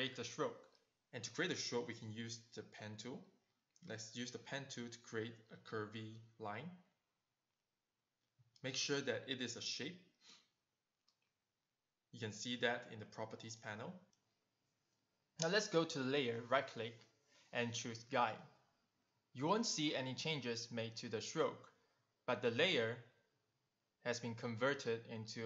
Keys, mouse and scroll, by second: 0.1 click, 3.7 click, 4.4 click, 4.9 click, 6.5 click, 8.0 v, 8.4 click, 9.0 click, 9.8 click, 14.1 click, 14.7 click, 15.1 click, 16.2 click, 18.3 right click, 21.0 click, 21.4 click, 22.0 click, 23.2 click.